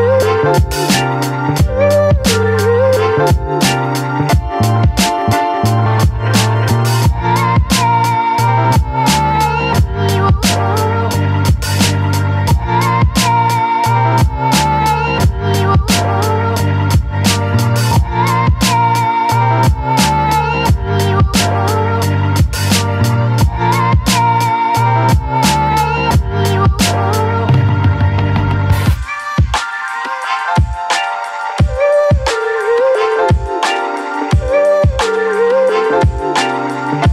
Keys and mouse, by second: 0.1 b, 1.1 middle click, 1.8 shift+middle click, 2.1 middle click, 2.8 b, 3.7 b, 4.4 b, 5.2 b, 6.2 middle click, 6.7 shift+middle click, 7.3 middle click, 8.2 click, 8.6 shift+click, 10.3 b, 11.6 ctrl+z, 11.9 b, 12.6 b, 13.1 b, 13.7 b, 14.7-15.8 right drag, 16.5 ctrl+z, 16.7-17.2 ], 17.2 right click, 17.6 right click, 18.3 right click, 19.0 right click, 19.2 click, 19.6 click, 20.9 a, 22.0 click, 22.0 middle click, 22.3 click, 22.4-23.5 middle drag, 23.5 click, 24.6 middle click, 27.9-28.4 [, 28.4 click, 29.1-30.2 drag, 30.8 click, 32.3 middle click, 32.9 shift+middle click, 33.1 middle click, 34.2 shift+middle click, 34.6 middle click.